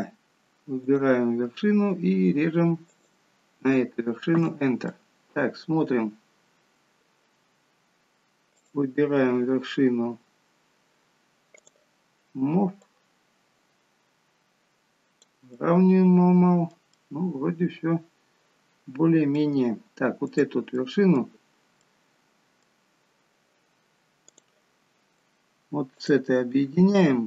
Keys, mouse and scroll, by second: 4.9 middle click, 8.6 click, 12.9 click, 15.6 middle click, 17.0 middle click, 20.4 click, 20.8 middle click, 21.4-21.9 scroll up 3, 21.9 middle click, 24.4 click, 26.1 shift+click.